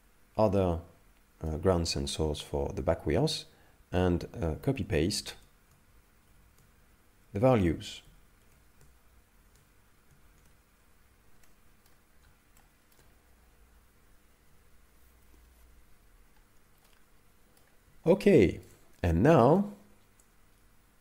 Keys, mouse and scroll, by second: 5.2 ctrl+c, 6.3 ctrl+v, 8.0 ctrl+x, 9.4 ctrl+c, 10.2 ctrl+v, 11.5 middle click, 12.1-12.5 scroll down 1, 12.6 shift+middle click, 13.2 scroll down 1, 16.3-16.9 scroll down 1, 16.9 middle click, 18.1 shift+middle click, 19.6 middle click.